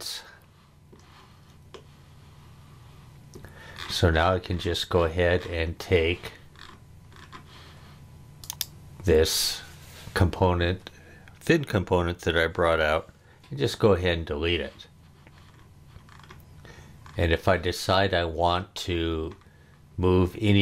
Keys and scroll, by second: 13.3 BackSpace.